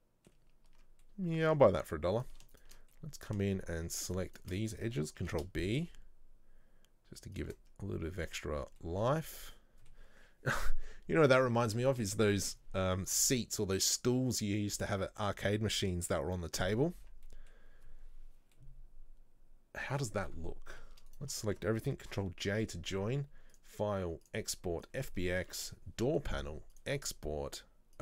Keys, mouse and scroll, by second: 0.8 Tab, 1.1-2.2 middle drag, 2.2 alt+right click, 2.6 alt+shift+right click, 3.0-4.2 middle drag, 4.2 alt+shift+right click, 4.4 alt+shift+right click, 5.3 ctrl+b, 7.9-8.3 scroll down 2, 8.3 middle click, 8.6 Tab, 8.9-17.9 middle drag, 17.9-18.4 scroll up 2, 18.7-21.2 middle drag, 21.2 shift+right click, 22.2 ctrl+j, 27.0 click.